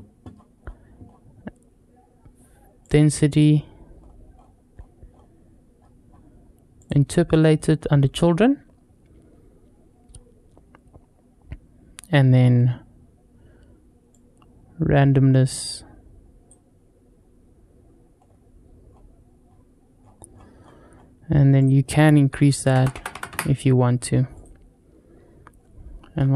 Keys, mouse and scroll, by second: 0.1-2.6 scroll down 5, 2.6 click, 3.8-5.6 scroll up 7, 5.6-6.6 scroll down 3, 6.6 click, 6.6 scroll down 1, 9.9 scroll down 2, 11.8-13.9 scroll down 2, 13.9-16.4 drag, 18.0-18.7 scroll up 4, 18.7 scroll up 2, 19.3-19.8 scroll down 2, 19.8-21.4 scroll up 7, 21.4-23.8 drag, 22.8 KP_0, 24.2 click.